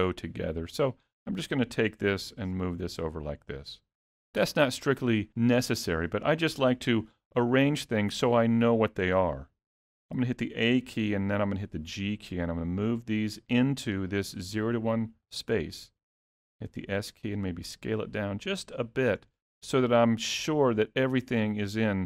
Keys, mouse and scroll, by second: 0.7 click, 1.4 click, 2.5 g, 10.3 a, 11.1 g, 16.4 s, 19.4 shift+middle click.